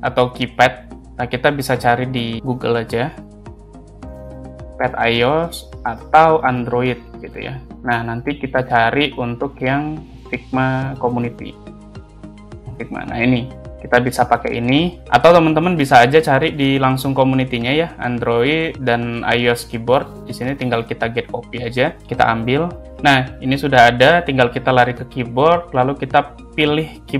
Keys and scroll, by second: 4.4 space, 7.8 Return, 10.1 space, 11.1 Return.